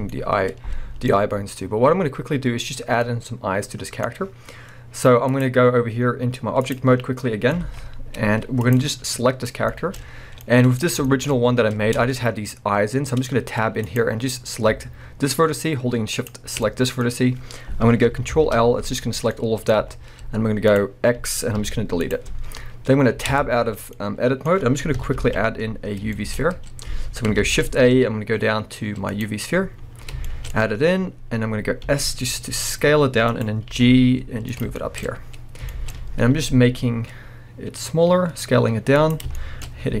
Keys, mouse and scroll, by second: 1.2-3.0 scroll up 2, 5.3-7.2 drag, 7.0 scroll down 1, 7.2-8.6 middle drag, 7.6 alt+a, 8.0-8.6 scroll up 2, 8.6 drag, 9.7-13.8 shift+middle drag, 10.1-10.4 scroll up 2, 11.4-12.0 scroll up 2, 12.0 Tab, 13.8 click, 16.1 shift+click, 16.6-20.8 middle drag, 18.3 ctrl+l, 19.8 z, 20.8 click, 21.6 x, 23.3 Tab, 23.6-23.9 scroll down 2, 23.9-33.4 middle drag, 24.9 KP_1, 25.2 alt+a, 25.8 scroll down 2, 26.4-27.4 scroll up 2, 27.4 shift+a, 29.4-29.8 scroll down 2, 30.5-31.5 scroll up 2, 31.5-31.9 scroll down 2, 31.9 s, 33.4 click, 33.7 g, 34.6 click, 34.8-39.0 shift+middle drag, 35.0 scroll up 2, 35.9 scroll up 1, 36.3 s, 39.1 click, 39.4-40.0 middle drag.